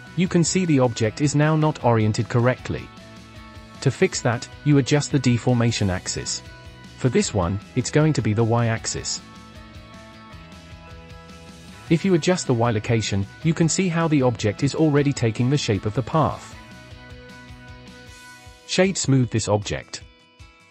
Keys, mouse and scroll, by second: 0.1-0.7 scroll down 3, 0.7-1.6 middle drag, 1.6 KP_7, 2.3 scroll down 2, 2.7-4.8 shift+middle drag, 5.9-8.8 drag, 8.8-9.8 middle drag, 9.8-10.2 scroll up 3, 10.2-11.3 shift+middle drag, 11.3 click, 12.6-15.5 drag, 15.5-16.1 scroll up 7, 16.1-17.0 middle drag, 17.0-17.7 scroll up 2, 17.7-18.3 scroll up 5, 18.3 click, 18.6 right click, 20.4-20.7 scroll down 2.